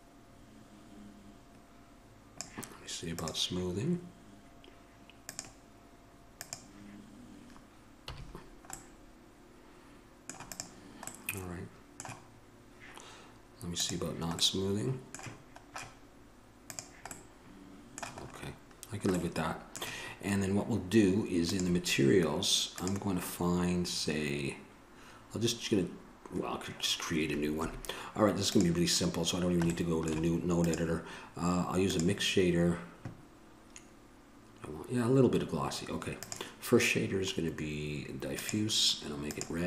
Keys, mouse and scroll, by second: 3.4-8.3 drag, 8.3 a, 11.4-12.8 drag, 12.8-14.1 middle drag, 14.1-17.5 drag, 17.5-28.8 middle drag, 28.8-39.6 drag.